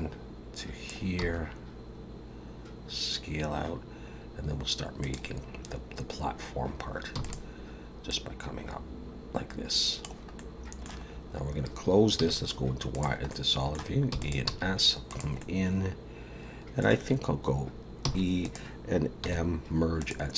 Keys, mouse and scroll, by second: 1.2 s, 7.1 e, 8.1 click, 10.4 middle click, 11.1-12.2 scroll down 2, 12.2 z, 13.3 middle click, 14.1 e, 14.5 s, 15.4 middle click, 18.0 e, 19.2 m.